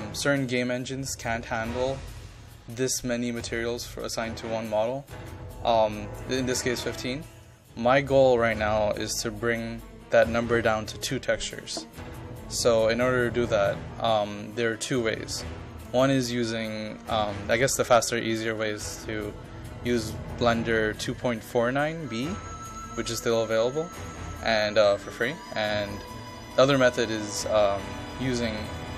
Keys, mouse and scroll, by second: 0.8 ctrl+click, 2.1-28.9 drag.